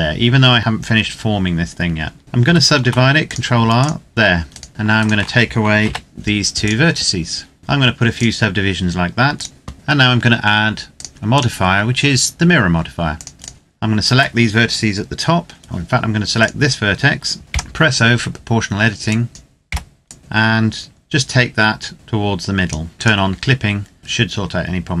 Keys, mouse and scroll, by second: 2.2 ctrl+r, 3.0 click, 4.4 right click, 4.7 shift+right click, 5.6 x, 6.4 click, 7.6-7.9 scroll up 1, 7.9 click, 10.7 click, 13.3 alt+right click, 16.1 right click, 17.4 o, 18.8 click, 19.3 scroll down 1, 19.4 o, 19.9 click, 20.2 scroll down 1, 21.9-22.6 scroll up 1, 22.9 click, 23.2-24.0 scroll up 1.